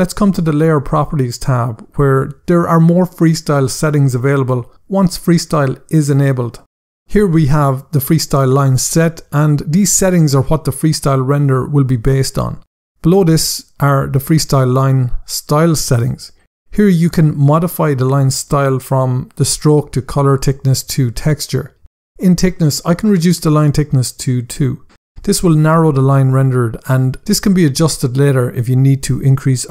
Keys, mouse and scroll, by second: 1.2 click, 7.4 scroll down 1, 13.7 click, 14.3 scroll down 1, 23.8 click, 24.6 2, 25.0 Return.